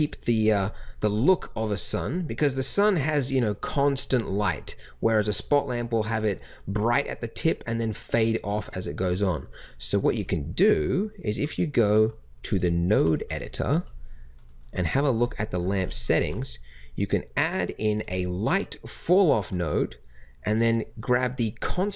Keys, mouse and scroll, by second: 11.4 click, 12.9 n, 16.2 shift+a.